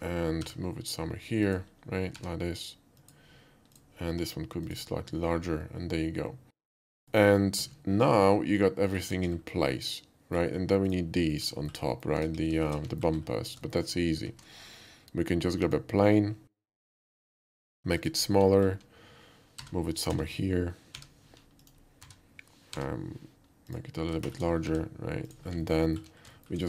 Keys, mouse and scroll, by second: 0.4 g, 1.5 click, 2.2 r, 3.0 click, 3.7 click, 4.1 s, 4.7 click, 5.3 scroll down 1, 5.6-6.9 middle drag, 7.1 middle click, 8.2-8.9 middle drag, 9.2 KP_5, 9.4 middle click, 9.7-10.4 middle drag, 10.9 click, 11.3 alt+middle click, 11.6 alt+middle click, 11.9 alt+middle click, 12.2 KP_5, 12.7 middle click, 12.9 middle click, 13.2 middle click, 13.7 middle click, 14.3 shift+a, 15.7 click, 16.7 s, 18.0 click, 18.5 alt+middle click, 19.6-22.8 typing, 21.6 click, 23.7 drag, 24.2 shift+middle click, 24.6 g, 25.3 click, 25.6 alt+middle click, 25.9 alt+middle click, 26.4 shift+middle click.